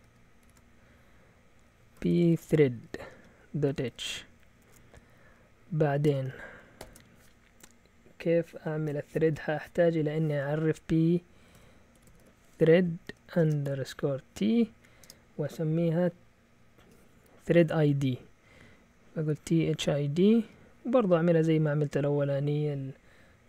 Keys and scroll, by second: 0.0-0.4 typing, 1.7-7.3 typing, 11.3-15.0 typing, 19.1-20.8 typing.